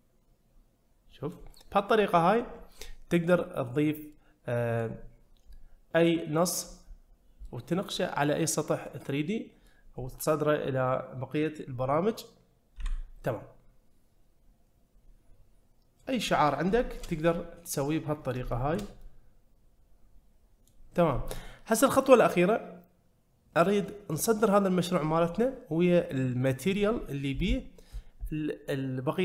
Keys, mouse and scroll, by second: 3.7-4.1 scroll down 1, 4.1-4.8 middle drag, 7.5-7.9 middle drag, 8.9-9.7 middle drag, 13.3-16.1 middle drag, 16.8 shift+middle click, 17.3 middle click, 18.5 shift+middle drag, 19.0-20.7 middle drag.